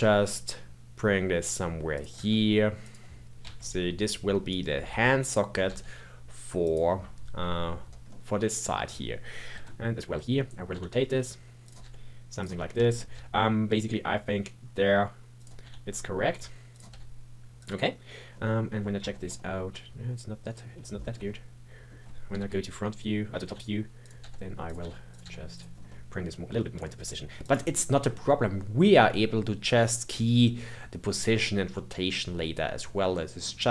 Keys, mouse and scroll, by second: 2.1 g, 8.0-9.4 middle drag, 9.4 KP_3, 10.3-10.7 scroll up 2, 10.7 r, 11.8 g, 12.5 scroll up 4, 12.8 shift+middle click, 13.1 g, 15.6 r, 16.9 g, 17.8-18.3 scroll down 1, 18.3-22.3 middle drag, 22.3 KP_7, 22.8-23.4 scroll up 2, 23.4 r, 24.2 g, 24.8 r, 25.2 g, 25.7 scroll down 2, 25.8-26.9 middle drag, 26.9 g, 27.7-30.7 middle drag, 31.7-33.7 middle drag.